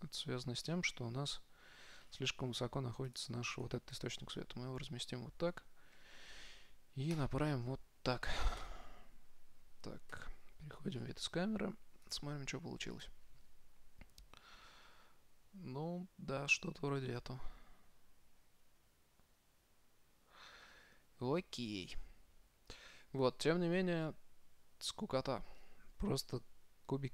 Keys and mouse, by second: 0.9-3.1 middle drag, 3.3-6.4 drag, 3.8-5.6 right drag, 6.2 r, 8.8 KP_0, 10.4 KP_0, 11.2-12.4 middle drag, 12.4-14.2 drag, 18.2-20.3 middle drag, 23.6-27.1 middle drag.